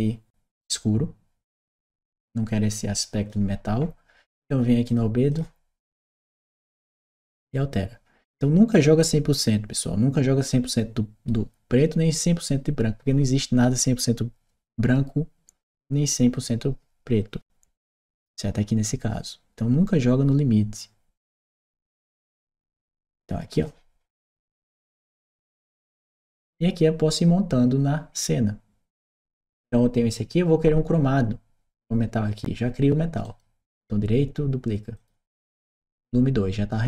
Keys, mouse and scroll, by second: 0.4 click, 1.7-3.1 drag, 4.7 click, 5.1 click, 6.1-8.6 drag, 21.2-22.2 drag, 23.4 click, 25.0-26.7 drag, 28.9 click, 33.0 right click, 34.7 click.